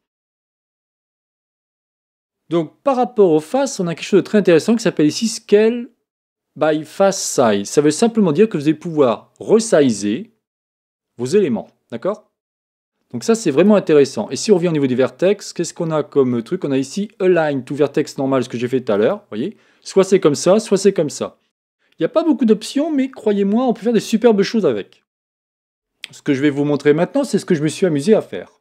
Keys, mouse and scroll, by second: 7.4 click, 9.0-12.0 drag, 14.4-17.3 drag, 18.9 click, 20.7 click.